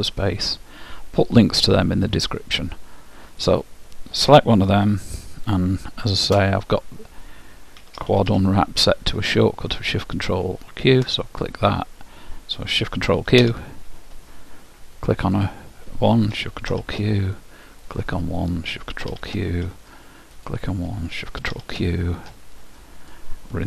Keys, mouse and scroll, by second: 3.5-5.3 drag, 6.3 space, 14.6 ctrl+shift+middle click, 15.3-17.2 drag, 17.9-19.7 drag, 20.4-22.3 drag, 23.1-23.6 drag.